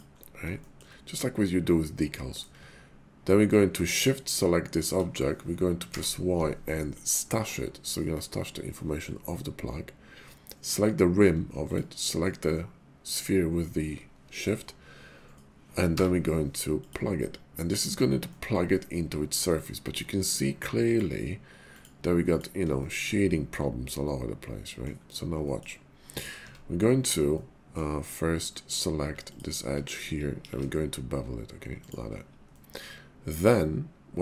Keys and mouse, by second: 0.6 shift+drag, 1.2-2.4 drag, 5.8 y, 11.7 shift+middle click, 15.8 y, 18.3-19.3 middle drag, 20.7-22.6 drag, 22.8 shift+middle click, 23.1 middle click, 23.6 click, 23.8-24.8 middle drag, 25.4 shift+middle click, 26.4 Tab, 27.2 middle click, 28.5 click, 29.3 alt+click, 30.4 ctrl+b, 31.8 shift+click, 32.5-34.2 middle drag.